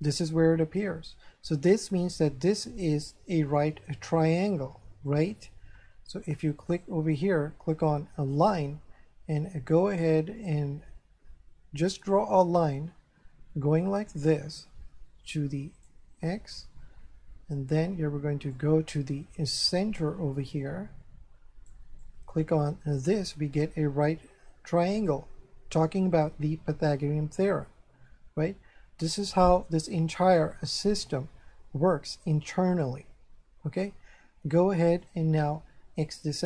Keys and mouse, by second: 5.1 click, 6.7 click, 10.5 click, 18.5 click, 22.0 click, 27.7 Escape, 36.0 click.